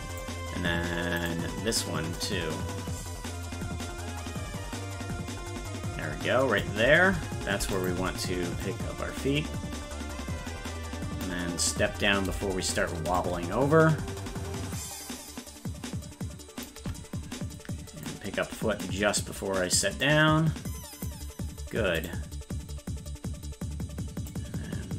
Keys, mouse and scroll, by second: 1.3 right click, 2.2-6.6 drag, 8.7-11.3 drag, 13.2-16.7 shift+drag, 18.1 click, 20.0-21.1 drag, 22.3 right click, 24.3-24.9 drag.